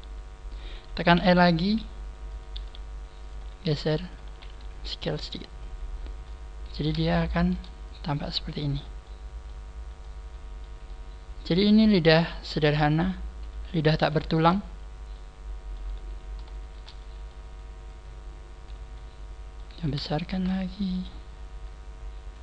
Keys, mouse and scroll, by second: 0.5 click, 1.1 e, 2.5 click, 2.5 g, 3.5 click, 3.5 r, 4.0 click, 4.2 s, 5.4 click, 5.5 middle click, 6.5-6.8 scroll up 2, 7.2 shift+middle click, 7.7 click, 8.9 shift+middle click, 9.8-10.1 scroll down 4, 10.1 shift+middle click, 10.9 shift+middle click, 12.5 middle click, 12.5 click, 13.2-13.8 scroll up 5, 13.8 a, 14.1 alt+shift+right click, 15.0 middle click, 16.0 middle click, 16.0 a, 16.5 alt+shift+right click, 16.9 middle click, 17.7 click, 18.9 middle click, 19.8 a, 20.1 alt+shift+right click, 20.7 middle click, 21.5 middle click, 21.5 click.